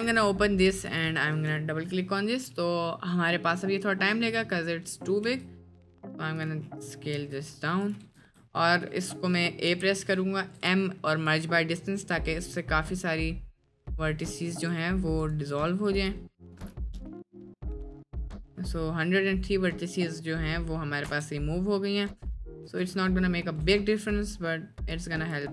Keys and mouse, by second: 4.1 middle drag, 4.9 middle click, 5.3 s, 7.2 s, 8.5 Tab, 9.1 click, 9.7 a, 10.1 click, 10.6 m, 12.8 click, 15.3-18.0 drag, 20.7 middle click, 21.3 Tab, 22.0 click, 23.0 Tab, 23.4 middle click, 23.7 Tab, 25.1 click.